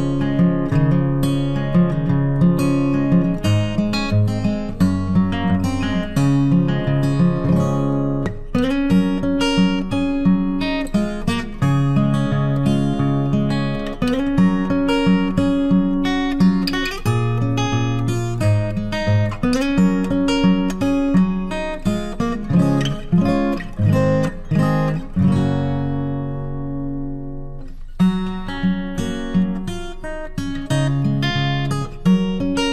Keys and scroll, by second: 4.2 ctrl+t, 27.9 ctrl+t, 28.4 ctrl+t.